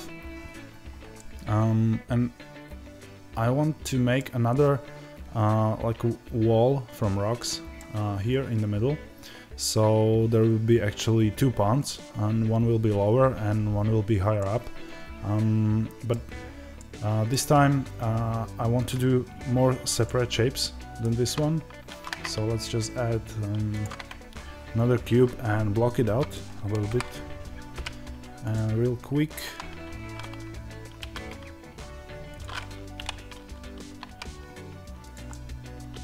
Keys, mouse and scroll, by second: 14.2 middle click, 21.8 shift+a, 28.4 click, 29.3 Tab, 32.8 o, 35.0 click, 35.2-36.0 middle drag.